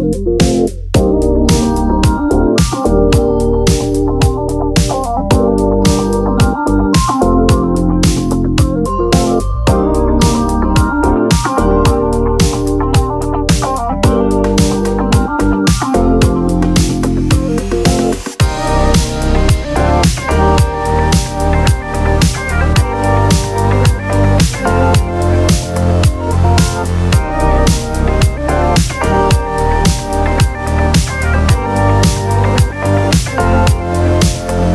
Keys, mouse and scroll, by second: 1.2 [, 2.3-3.2 click, 3.5-7.5 drag, 7.5-8.2 drag, 14.9 alt+scroll up 1, 15.8-16.9 drag, 17.0-17.4 alt+scroll down 2, 17.4 alt+scroll up 1, 17.9 [, 18.0 [, 18.1 [, 18.2 [, 18.5-18.8 click, 19.1 alt+scroll down 1, 19.7-20.5 alt+click, 21.0-21.3 click, 21.8-22.4 alt+scroll up 2, 22.4 [, 22.5 [, 23.1-24.0 click, 24.0 alt+scroll down 2, 24.4 space, 24.5 click, 24.6 space, 25.1 alt+scroll down 1, 25.4 ,, 25.6 right click, 26.1 click, 26.1 right click, 27.6 click, 30.1 right click, 32.4 click.